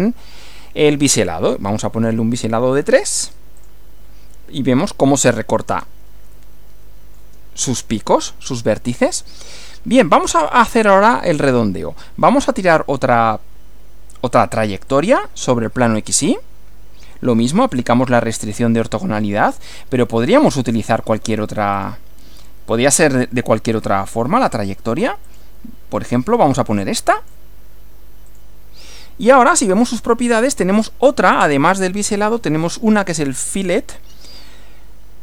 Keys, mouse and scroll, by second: 1.6-2.5 scroll up 2, 2.5 scroll down 1, 3.6 click, 6.4-7.4 shift+middle drag, 10.4 click, 14.9 click, 17.7 click, 21.8 click, 25.3 click, 27.2 click, 28.4 click, 29.6 click.